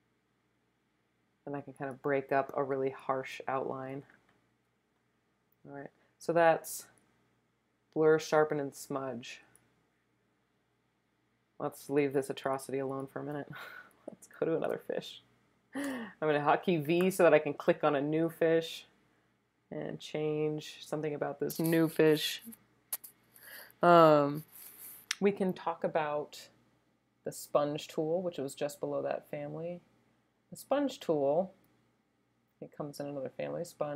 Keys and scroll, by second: 12.5-14.5 typing, 15.9 v.